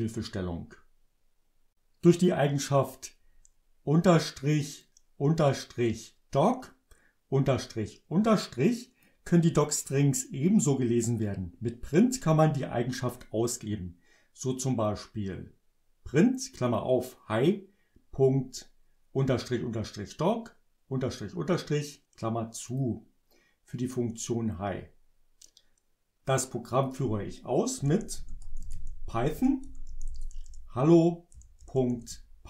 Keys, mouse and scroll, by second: 4.9-9.3 drag, 22.8 click, 26.8 click, 27.6-32.3 typing.